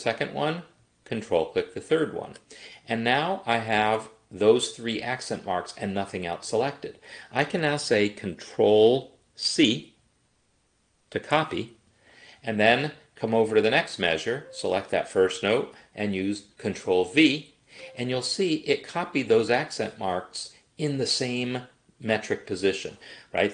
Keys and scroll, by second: 10.8 ctrl+c, 17.2 ctrl+v.